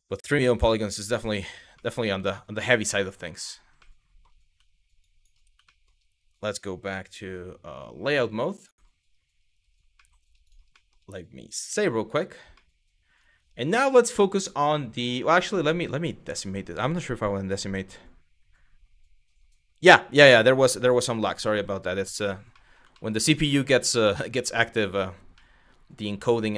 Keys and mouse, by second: 0.2 KP_Divide, 1.5 middle click, 1.9 shift+middle click, 3.6 middle click, 4.8 shift+click, 5.3 shift+middle click, 9.6 middle drag, 10.1 click, 10.4 middle click, 11.5 ctrl+s, 12.2-12.9 middle drag, 15.0 click, 22.2 middle drag, 22.5 shift+middle drag, 23.0-24.6 middle drag, 25.1-26.5 middle drag.